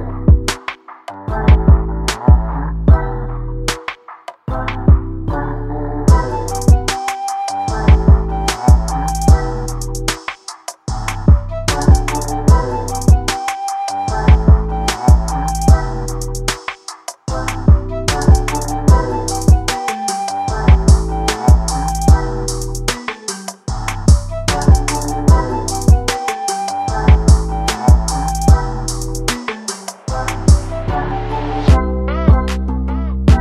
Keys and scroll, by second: 0.3 ctrl+0, 6.7 ctrl+t, 28.5 ctrl+a.